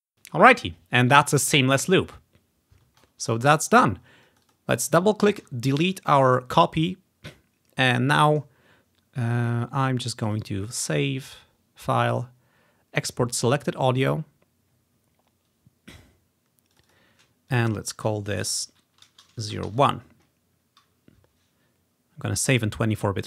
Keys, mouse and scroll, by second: 0.0 space, 3.4 scroll down 1, 4.3 click, 5.5 Delete, 6.2 click, 6.4 click, 7.2-7.9 ctrl+scroll up 1, 10.4 click, 13.9 click, 14.5-16.2 drag, 16.8-19.1 drag, 18.4 Home, 18.6 ctrl+shift+Right, 18.8 ctrl+shift+Right, 19.1-20.1 typing.